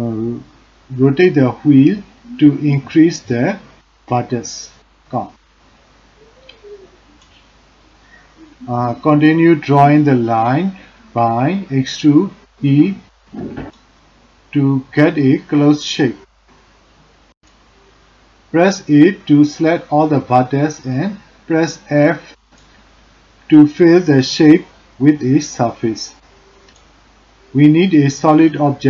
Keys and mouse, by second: 1.9 a, 2.5 g, 5.7 click, 8.7 e, 13.7 a, 15.4 shift+middle click, 17.4 f, 20.1 shift+z, 21.1 shift+middle click, 21.6 middle click, 22.1 shift+middle click, 26.6-28.8 drag.